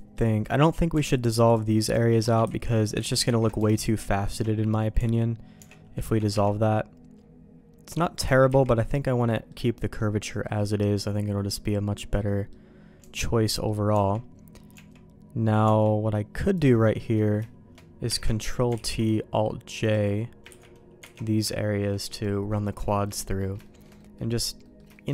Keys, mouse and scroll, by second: 1.0 alt+click, 2.4 ctrl+x, 3.2 ctrl+z, 3.7 alt+shift+click, 4.9 Tab, 5.5 Tab, 6.0 ctrl+x, 6.3 Tab, 6.6-8.1 middle drag, 8.2 ctrl+z, 8.4 ctrl+z, 9.2 middle click, 9.7 middle click, 10.4 middle click, 12.1 middle click, 13.0 Tab, 13.4 middle click, 13.9 Tab, 14.7 Tab, 15.6 Tab, 16.5 click, 16.9 middle click, 18.2 ctrl+t, 18.7 alt+j, 19.8 click, 20.4 ctrl+t, 21.1 alt+j, 21.2 middle click, 21.5 shift+middle click, 22.5 middle click, 22.8 shift+middle click, 23.2 middle click, 23.6 shift+middle click, 23.9 middle click, 24.6 middle click, 24.9 shift+middle click.